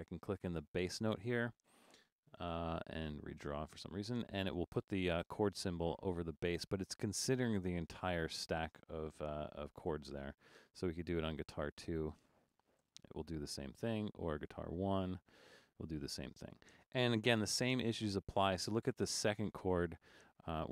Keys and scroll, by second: 3.1 super+d, 10.1 BackSpace, 11.5 BackSpace, 13.8 super+d, 15.3 super+d, 17.5 BackSpace.